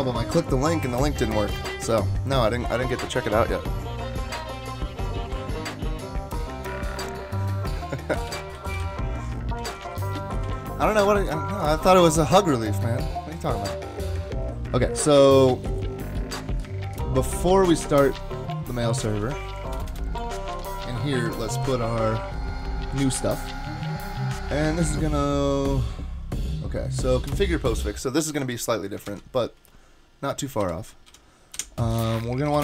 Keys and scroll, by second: 7.9-9.2 typing, 9.7 super+z, 10.4 super+s, 19.7 Return, 19.9 Return, 20.5 Up, 21.3 super+v, 27.3 Return, 29.1 super+Left, 30.6 Delete, 31.1 Delete, 31.5 Delete, 31.9 Page_Down, 32.1 Page_Down, 32.5 super+Right.